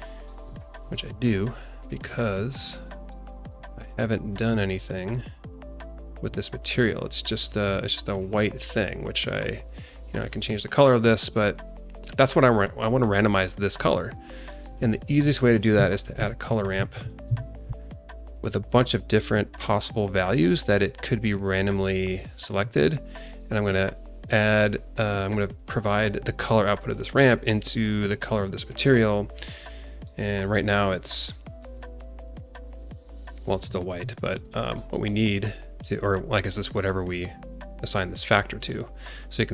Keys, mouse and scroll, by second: 0.0 scroll up 2, 0.5 alt+shift+middle click, 1.8-2.7 drag, 2.9-3.5 scroll down 3, 3.6 alt+shift+middle click, 6.1 click, 7.2 click, 7.6-8.1 scroll up 1, 8.1 click, 8.4 click, 8.8 click, 9.2 click, 14.0-14.5 scroll up 2, 14.5 scroll down 2, 14.6 shift+middle click, 14.9 shift+middle click, 15.5 click, 16.0 ctrl+shift+a, 18.4-19.1 scroll up 3, 19.2-19.5 scroll down 1, 19.5 click, 21.5 click, 22.0 scroll up 1, 23.4-27.6 drag, 28.1 click, 28.7 click, 29.6-29.9 drag, 30.0-31.0 scroll up 1, 31.2 alt+middle click, 32.3 click, 32.8-33.2 scroll up 3, 33.3 scroll down 2, 34.2 click, 34.9 scroll up 1, 35.0-36.0 scroll down 2, 36.0-39.5 drag.